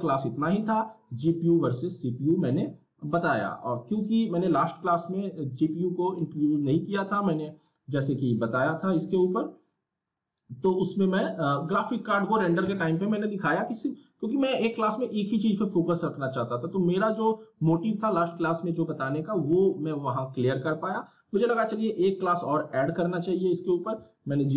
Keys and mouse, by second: 9.1 right click, 10.1 click.